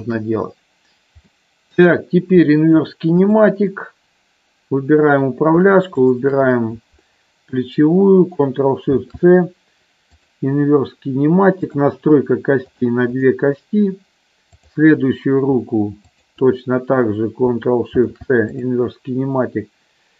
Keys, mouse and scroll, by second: 1.4 middle click, 2.5 middle click, 3.3 click, 8.9 ctrl+shift+c, 12.6 click, 13.1 click, 14.5 click, 16.1 shift+click.